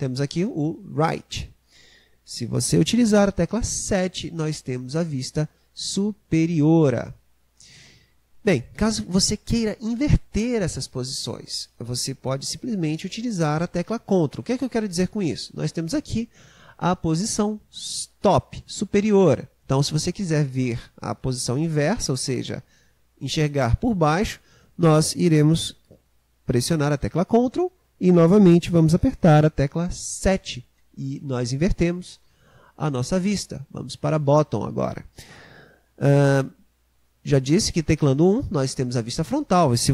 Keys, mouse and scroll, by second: 3.9 KP_7, 30.2 ctrl+KP_7, 37.7 KP_1.